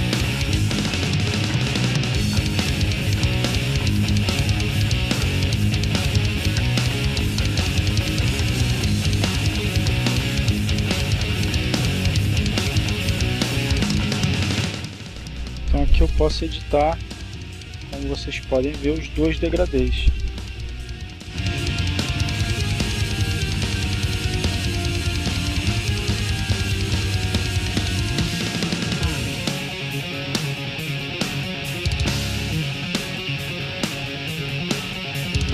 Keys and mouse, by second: 1.1 click, 3.7 click, 8.1 click, 10.0 click, 14.4 click, 15.7-18.0 drag, 20.7-22.2 drag, 22.5-24.2 drag, 24.7-26.4 drag, 33.9 click.